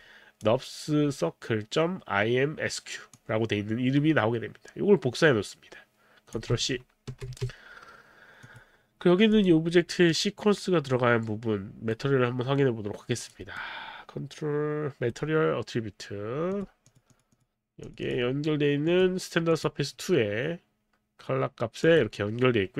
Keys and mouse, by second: 3.1 click, 7.1 ctrl+c, 8.5 click, 9.3 click, 10.1 right click, 13.2 click, 13.6 right click, 16.6 click, 16.9 click, 18.2 click, 19.1 click, 19.5 click, 21.8 click.